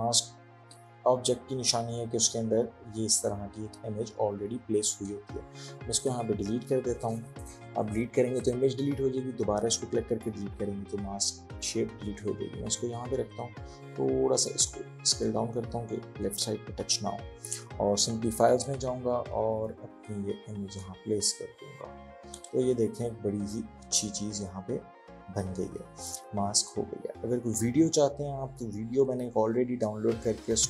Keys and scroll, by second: 6.1 Delete, 10.2 Delete.